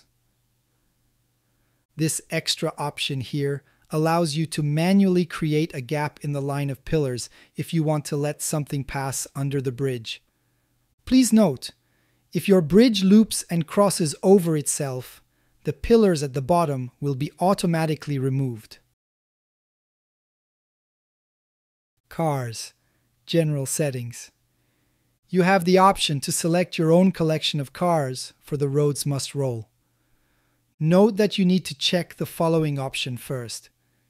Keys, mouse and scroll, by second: 0.0-2.4 drag, 3.3-10.7 drag, 12.0-12.4 shift+middle drag, 12.7 click, 13.2 Tab, 14.3 middle click, 14.6 click, 15.0 g, 15.2 z, 17.0 click, 17.5-19.2 middle drag, 19.2 click, 22.3 click, 22.6 a, 22.7 a, 23.4 click, 24.6-27.0 drag, 28.3-28.8 middle drag, 29.2-29.6 shift+middle drag, 30.0-31.3 ctrl+middle drag, 32.0-32.6 shift+middle drag.